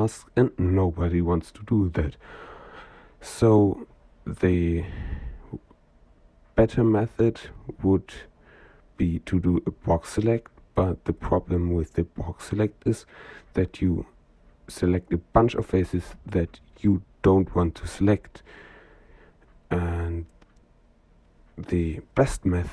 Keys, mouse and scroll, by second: 1.8 middle click, 6.7 middle click, 8.2-9.1 middle drag, 11.1 click, 12.3-13.6 middle drag, 16.2 middle click, 18.1 shift+click, 19.5-20.6 middle drag, 22.0 click.